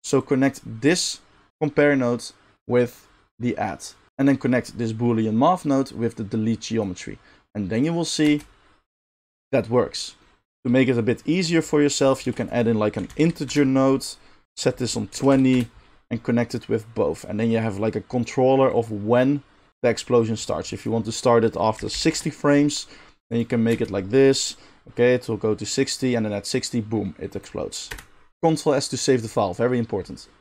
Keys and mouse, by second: 4.1 middle click, 4.2-14.4 drag, 8.2 space, 10.5 space, 12.2 shift+a, 14.4 middle click, 14.7-30.4 drag, 23.7 space, 27.9 space, 28.3 ctrl+s.